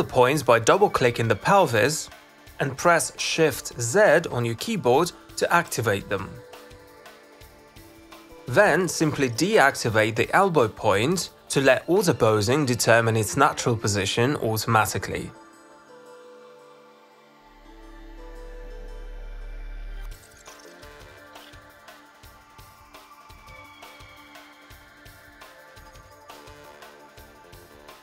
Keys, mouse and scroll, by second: 0.4 click, 0.9 click, 1.1 click, 4.7 click, 8.9 z, 9.9 click, 10.4 click, 11.3 click, 12.2 z, 13.7 right click, 21.8 right click, 22.0 z, 22.6 right click, 24.8 click, 25.6 click, 26.0 z, 26.3 click, 26.5 click.